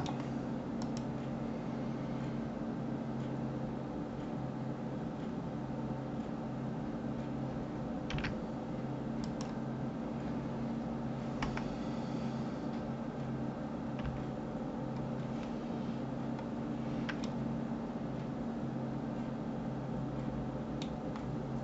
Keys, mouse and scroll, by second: 0.8 click, 11.4 KP_1, 15.8-17.2 scroll up 3, 17.2-20.3 middle drag.